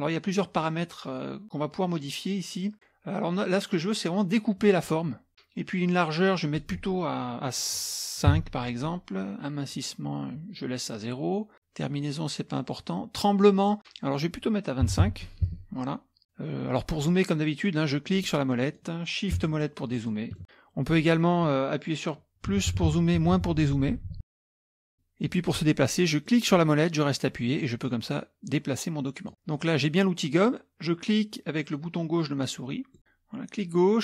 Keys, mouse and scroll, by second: 6.3 click, 8.3 KP_5, 13.4 click, 14.9 KP_2, 15.5 KP_Enter, 18.1 middle click, 18.1-19.0 scroll up 4, 18.6 middle click, 19.4-20.2 shift+scroll up 2, 20.4 middle click, 22.5 KP_Add, 22.8 KP_Add, 23.2 KP_Add, 23.3 KP_Subtract, 23.6 KP_Subtract, 23.9 KP_Subtract, 24.0 KP_Subtract, 24.2 KP_Subtract, 24.3 KP_Subtract, 24.9 middle click, 24.9 scroll up 1, 26.3-29.3 middle drag, 33.0-33.3 scroll down 2, 33.6-34.0 drag.